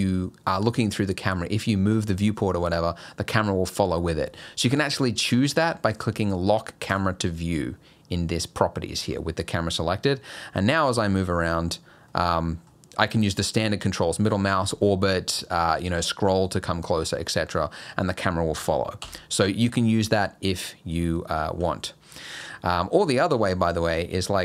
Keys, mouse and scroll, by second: 6.9 click, 9.0 n, 9.9 middle click, 11.6-11.9 scroll up 4, 12.1 middle click, 12.8 scroll up 1, 14.9 middle click, 15.2-15.9 scroll up 2, 15.9 scroll down 1, 16.2-16.9 scroll up 3, 17.1-17.8 scroll down 5, 19.0 n, 20.1 click, 21.6 n, 22.2 middle click, 22.6-22.9 scroll up 4, 23.1 shift+middle click, 23.5-24.1 scroll up 2, 23.7 middle click.